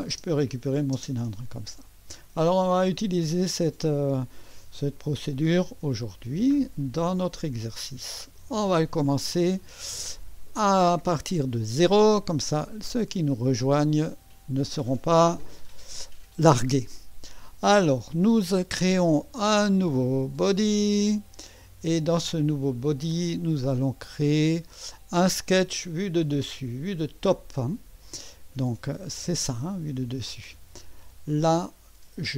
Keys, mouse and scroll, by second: 0.1 space, 0.9 space, 5.2 click, 6.8 click, 7.1-9.8 drag, 11.3 click, 14.0 click, 20.0 click, 25.4 click, 29.2 click.